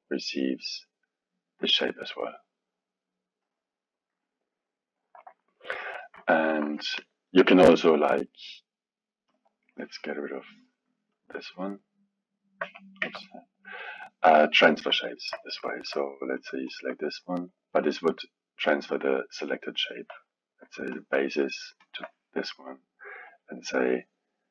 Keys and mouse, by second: 6.2-9.3 alt+middle drag, 9.3 click, 11.1-12.6 drag, 12.6 Tab, 13.0 Tab, 13.8 click, 15.0-16.4 alt+middle drag, 16.4-19.1 drag, 19.8 click, 20.9 click, 21.8 shift+drag, 23.3-24.5 drag.